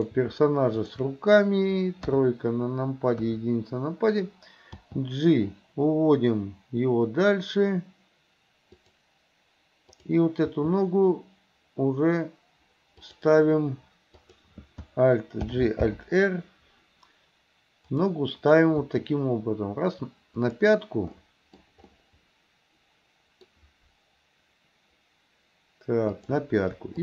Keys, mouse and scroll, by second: 0.0 shift+click, 0.8 shift+click, 2.1 KP_3, 3.2 KP_1, 4.8 g, 10.0 click, 10.6 g, 14.2 click, 15.5 alt+g, 15.9 alt+r, 18.0 click, 21.2 middle click, 22.0-23.5 middle drag, 26.1 click.